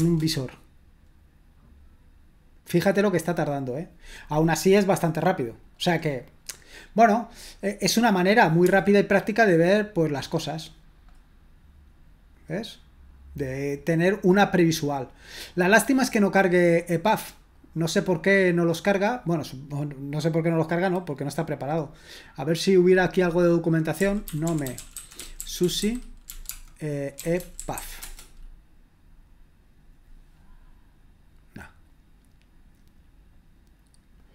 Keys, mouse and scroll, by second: 0.2 Return, 5.6 click, 8.2 click, 11.0 click, 14.5 click, 21.6 click, 23.1 click, 23.7-28.2 typing, 31.6-32.0 scroll down 1, 34.2 click.